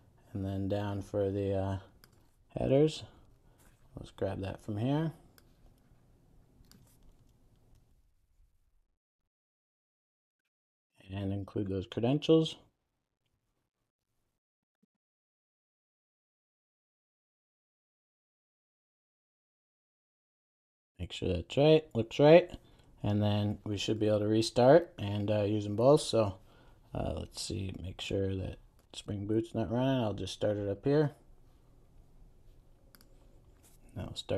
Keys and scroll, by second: 2.9 super+e, 7.3 super+c, 8.3 super+e, 10.2 super+v, 14.4 Return, 24.4 super+s, 31.0 ctrl+r.